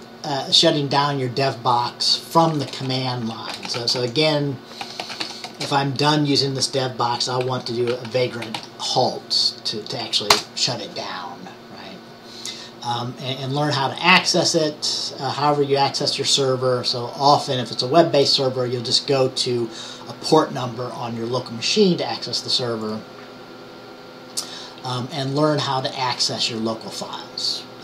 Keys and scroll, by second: 3.6-5.8 typing, 7.5-9.2 typing.